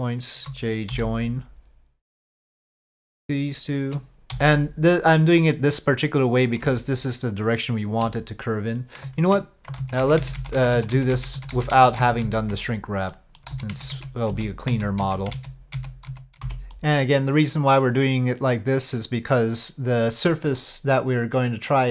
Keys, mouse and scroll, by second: 0.0 shift+click, 0.9 j, 2.1 click, 4.3 j, 6.2 click, 9.8 ctrl+z, 10.0 ctrl+z, 10.2 ctrl+z, 10.3 ctrl+z, 10.6 ctrl+z, 10.7 ctrl+z, 10.9 ctrl+z, 11.1 ctrl+z, 11.3 ctrl+z, 11.5 ctrl+z, 11.7 ctrl+z, 12.0 ctrl+z, 12.2 ctrl+z, 13.1 click, 13.5 ctrl+z, 13.7 ctrl+z, 13.9 ctrl+z, 14.3 ctrl+z, 14.7 ctrl+z, 15.0 ctrl+z, 15.3 ctrl+z, 15.7 ctrl+z, 16.1 ctrl+z, 16.4 j, 16.7-17.7 middle drag, 20.6 middle click, 21.4 click, 21.6 middle click.